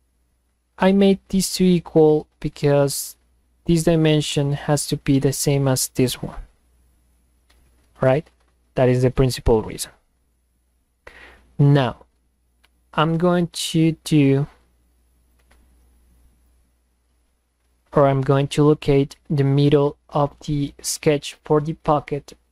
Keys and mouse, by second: 2.6 click, 5.9 click, 14.0-15.3 drag, 16.5-18.1 drag, 18.8 click.